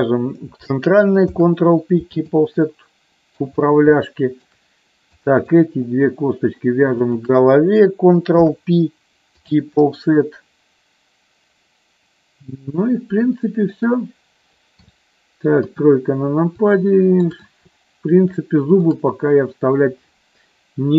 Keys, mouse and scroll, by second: 1.3 ctrl+p, 2.7 middle click, 3.9 shift+middle click, 5.3 click, 7.1 shift+click, 8.3 ctrl+p, 12.8 shift+middle click, 15.5 KP_3, 16.6 middle click, 18.4 shift+middle click.